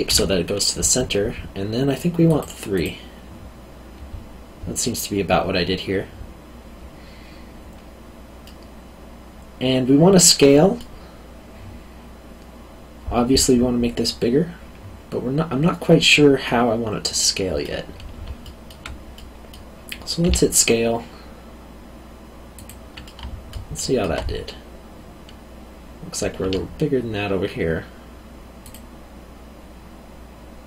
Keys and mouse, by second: 0.1 Escape, 2.2 click, 8.4 middle click, 16.4 middle click, 18.4 alt+middle click, 20.2 s, 22.5 click, 23.0 middle click, 26.4 s, 28.6 click.